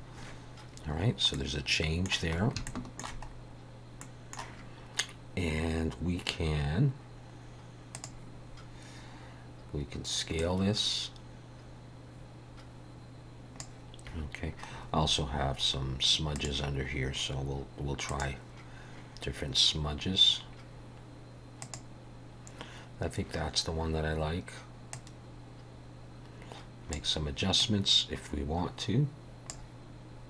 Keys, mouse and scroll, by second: 1.0 scroll down 2, 1.4 middle click, 2.4 scroll up 2, 2.7 shift+middle click, 3.3-3.8 scroll up 2, 4.1 middle click, 5.2 scroll down 3, 8.0 click, 8.5 scroll down 3, 10.5 click, 14.8-16.0 scroll up 10, 16.4 click, 17.0-17.3 scroll down 4, 18.2 click, 21.7 click, 25.0 click, 27.7 click.